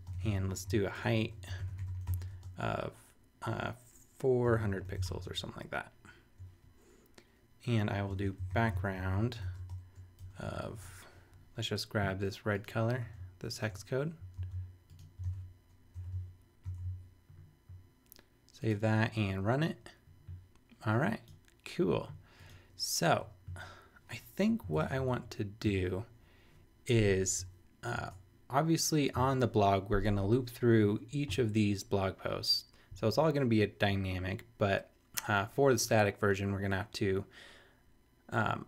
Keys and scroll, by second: 0.0-5.5 typing, 7.8-10.8 typing, 14.4 shift+super+c, 15.2 super+v, 15.9 super+;, 16.6 super+s, 24.7 super+Left, 25.1 super+Return, 25.6 Up, 28.0 super+Tab.